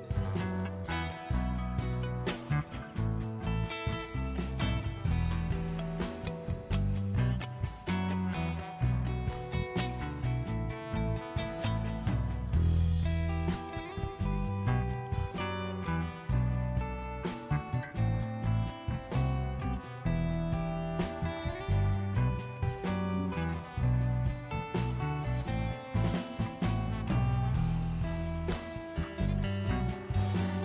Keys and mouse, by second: 0.6 click, 1.0 drag, 1.3 click, 7.1 Tab, 8.3 click, 9.5 e, 9.7 z, 11.7 s, 12.3 click, 13.6 ctrl+z, 13.9 s, 14.2 click, 16.6 e, 16.8 z, 19.0 click, 20.3 f, 20.9 ctrl+z, 21.4 click, 22.1 e, 22.2 y, 24.3 ctrl+click, 24.6 f, 25.0 click, 25.6 Tab, 26.8 Tab, 28.0 ctrl+b, 28.7 click, 29.4 ctrl+b, 30.1 Tab.